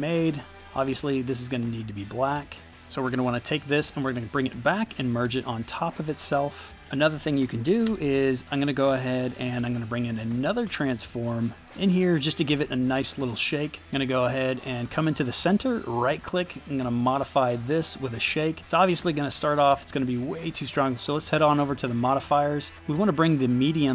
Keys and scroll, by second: 7.8 shift+space, 8.8 x, 9.3 f, 9.5 Return.